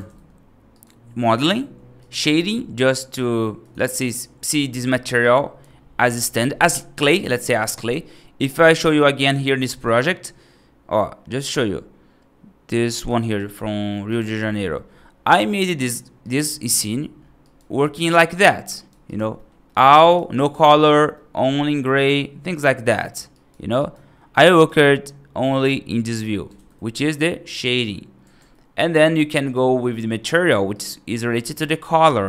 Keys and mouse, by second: 0.6 right click, 3.5 click, 4.3 click, 5.1 right click, 6.1 F2, 9.2-14.1 drag, 15.8 click, 16.1 right click, 17.3 right drag, 17.9 middle drag, 18.6 right drag, 19.2 middle click, 19.5-19.9 middle drag, 19.9-20.7 right drag, 21.0 middle drag, 22.5-22.9 right drag, 23.2 right drag, 23.6 right drag, 24.4 right click, 24.7 middle drag, 30.6 right drag, 31.2 middle drag.